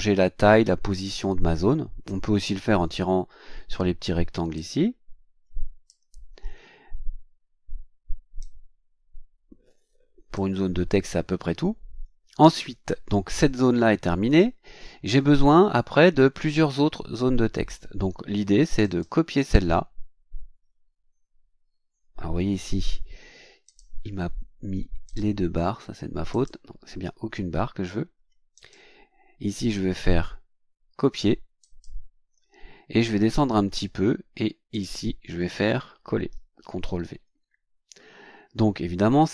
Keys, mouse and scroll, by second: 4.6-6.0 drag, 8.4-10.5 drag, 14.7-15.0 scroll down 2, 18.8 right click, 23.6 click, 25.0 click, 26.3 click, 28.5 right click, 31.6 click, 32.7-33.1 scroll down 1, 33.8 scroll down 1, 34.7 click, 36.6 ctrl+v.